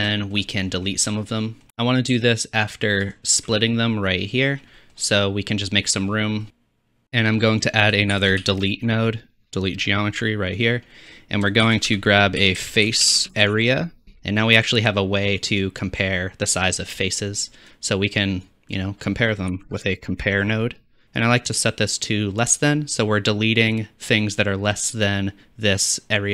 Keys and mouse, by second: 3.1 alt+shift+middle click, 3.1 alt+shift+click, 6.5 click, 7.2 click, 8.3 shift+a, 11.6 shift+a.